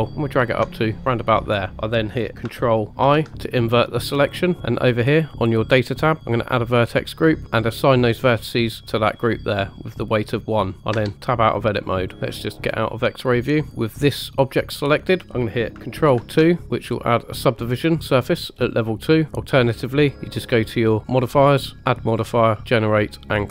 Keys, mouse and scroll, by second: 0.3 ctrl+click, 3.0 ctrl+i, 4.7 click, 5.2 click, 6.8 click, 8.3 click, 10.9 Tab, 11.8 middle click, 12.7 click, 13.7 scroll up 1, 16.6 ctrl+2, 16.7 click, 19.3 click, 21.8-23.5 drag.